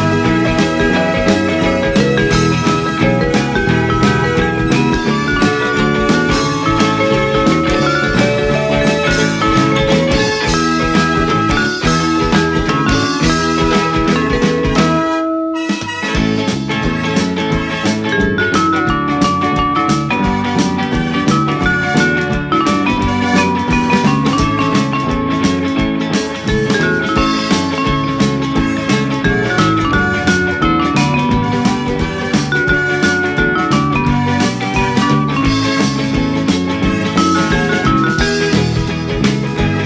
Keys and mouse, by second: 0.7 middle click, 2.1 shift+middle click, 4.3 click, 5.0 shift+middle click, 6.3 F6, 6.6 click, 8.1 shift+d, 8.9 right click, 9.6 Tab, 10.2 shift+middle click, 11.9 g, 11.9 z, 14.3 click, 15.4 a, 15.6 s, 17.3 click, 18.4 s, 19.2 click, 19.9 ctrl+r, 22.4 click, 22.7 right click, 23.9 ctrl+r, 24.9 click, 25.2 right click, 26.5 click, 28.9 shift+click, 30.6 shift+click, 33.1 middle click, 34.0 shift+click, 35.6 middle click, 36.6 shift+click, 39.1 middle click.